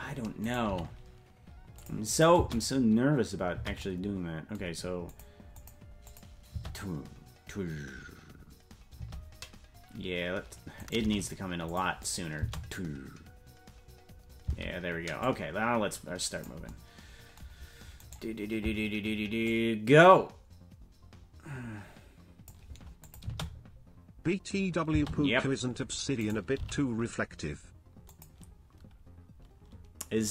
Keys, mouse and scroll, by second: 0.4 right click, 0.6 g, 2.1 click, 2.3 space, 3.8 space, 5.1 click, 5.5 click, 6.1 click, 6.5 space, 9.6 space, 10.7 right click, 11.0 g, 12.0 click, 12.3 space, 14.9 space, 15.2-16.5 drag, 18.1 right click, 19.4-22.5 drag, 23.0 click, 23.2 space, 25.6 space, 26.1 right click, 26.5 g.